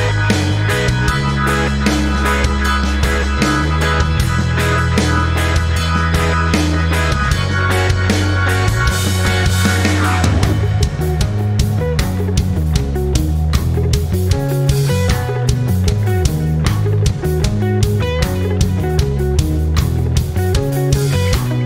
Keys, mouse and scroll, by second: 5.6 click, 8.0 ctrl+scroll down 1, 9.0 ctrl+scroll up 1, 10.2 scroll down 1, 10.9 v, 12.1-21.6 drag.